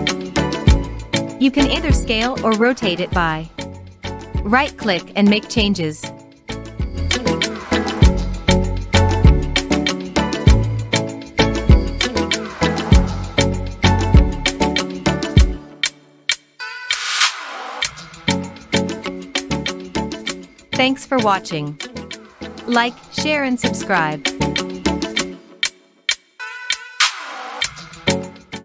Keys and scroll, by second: 4.6-6.2 Up, 12.1-12.7 Down, 14.4 Up, 14.5 Up, 14.6 Up, 14.7 Up, 14.8 Up, 14.9 Up, 15.0 Up, 15.9 Up.